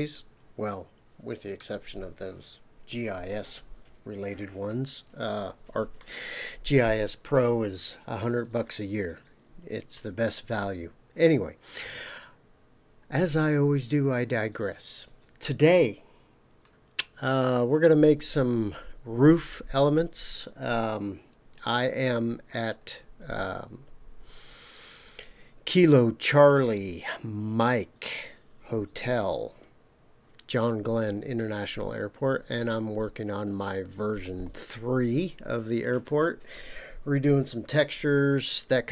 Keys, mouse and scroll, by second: 21.6-22.7 scroll down 5, 33.9-38.9 scroll up 3.